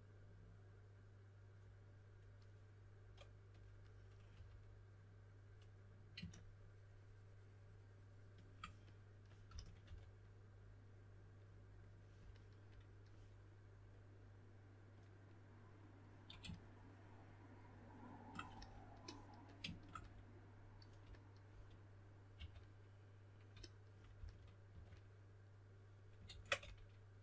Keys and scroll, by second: 4.3 3, 9.2-10.3 typing, 22.3 2, 24.1-25.2 typing, 26.2 super+z, 26.5-27.2 typing.